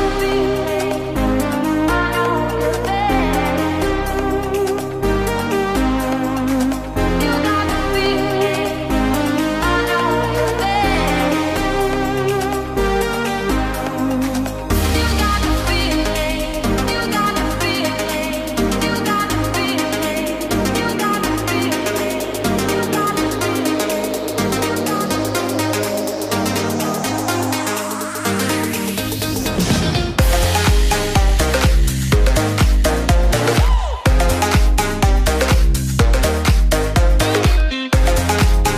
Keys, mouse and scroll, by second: 2.7 click, 4.1-7.1 drag, 8.6 click, 12.3 click, 14.9-17.9 drag, 18.1 right click, 20.2 click, 22.3-26.9 drag, 32.4-33.8 drag, 33.9-36.4 drag.